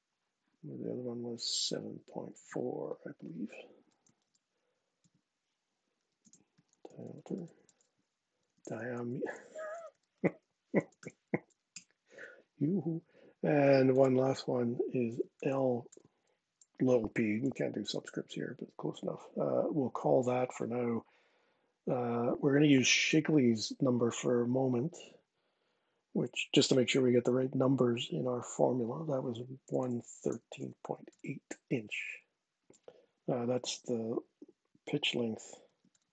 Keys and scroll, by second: 2.1 super+Tab, 3.3-4.4 typing, 4.7 Tab, 5.4-11.2 typing, 8.2 Left, 8.3 Left, 8.5 Left, 11.4 Return, 14.8-15.6 typing, 17.1 Tab, 17.6 Tab, 29.1-31.3 typing, 31.7 Tab, 35.1-36.1 typing.